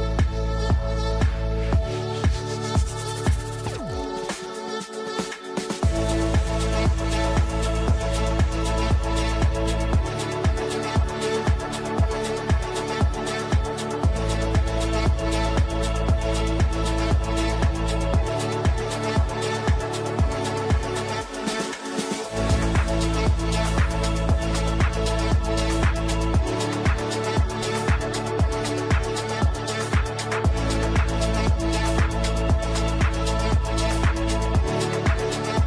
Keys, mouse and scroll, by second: 1.3-3.5 typing, 4.5-13.3 drag, 13.3 F4, 14.6-20.1 drag, 20.7 shift+Page_Up, 24.8-27.3 drag, 27.3 F3, 28.3-30.7 alt+drag, 30.7 ctrl+right click, 31.6 ctrl+r, 32.6 click, 33.3 shift+F2, 34.8-35.6 drag.